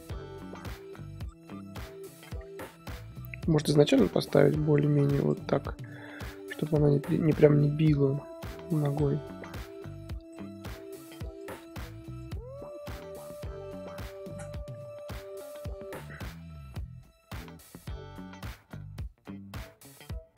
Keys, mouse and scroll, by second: 1.8 r, 3.5 click, 3.8 r, 6.0 i, 6.9-9.2 drag, 9.2 a, 10.2 click, 10.6 ctrl+c, 11.2 click, 12.4 ctrl+v, 13.6 i, 15.1-20.3 drag.